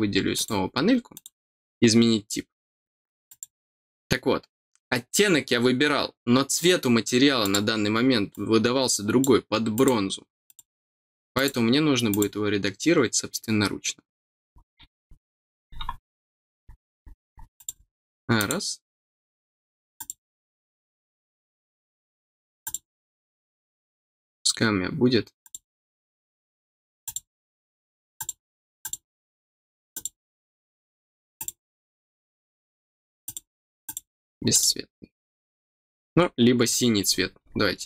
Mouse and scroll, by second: 0.3 click, 1.1 click, 3.2 click, 7.4 click, 8.3 click, 9.7 click, 10.4 click, 11.3 click, 12.0 click, 17.5 click, 18.3 click, 19.9 click, 22.6 click, 25.4 click, 27.0 click, 28.1 click, 28.8 click, 29.9 click, 31.3 click, 33.2 click, 33.8 click, 34.5 click.